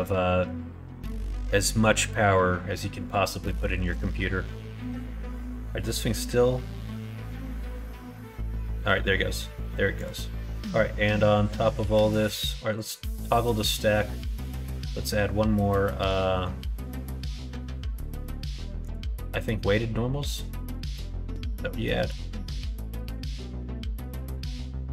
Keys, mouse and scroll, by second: 12.6 click, 14.3-15.6 drag, 16.0 middle click, 18.8-24.9 drag.